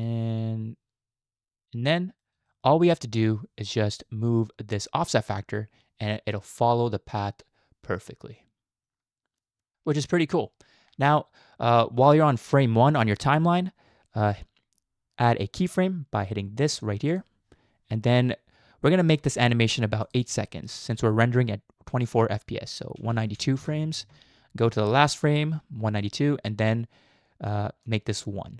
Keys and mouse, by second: 1.6-2.3 middle drag, 2.5 shift+middle click, 5.3-10.0 drag, 17.1 click, 20.1-23.7 drag, 25.2 click, 27.8 click.